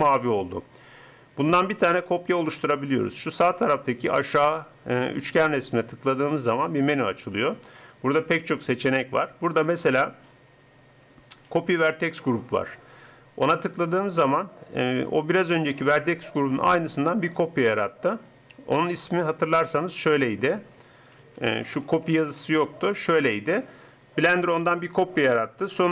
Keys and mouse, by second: 5.8-7.6 drag, 18.9-21.6 drag, 22.0 BackSpace, 22.4 BackSpace, 22.6 BackSpace.